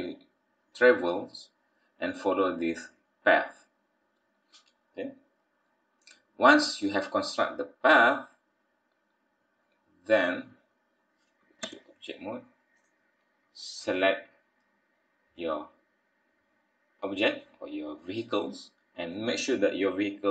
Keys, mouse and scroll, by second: 0.7-1.6 scroll down 4, 1.6 scroll up 2, 4.4-4.7 scroll down 2, 4.7-5.1 scroll up 4, 7.8-8.4 scroll down 3, 8.4-9.2 scroll up 4, 10.7-11.2 scroll up 3, 11.6 Tab, 12.4-12.7 scroll down 2, 12.7 click, 13.9 click, 14.2-14.7 scroll down 2, 14.6-15.4 scroll up 6, 15.4 middle click, 18.2 middle click.